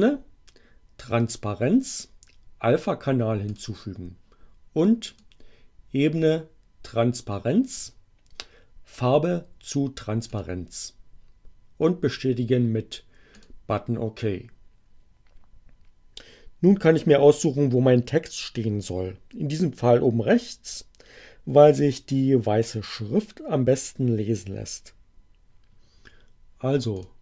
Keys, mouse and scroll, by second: 3.5 click, 5.1 click, 10.3 click, 13.3 click, 26.9 click.